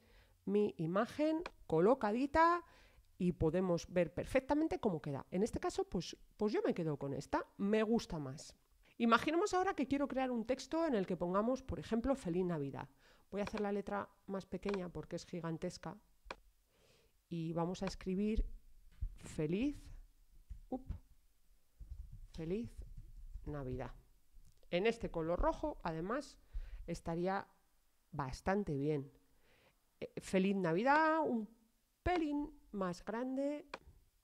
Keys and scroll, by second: 19.3-25.0 typing.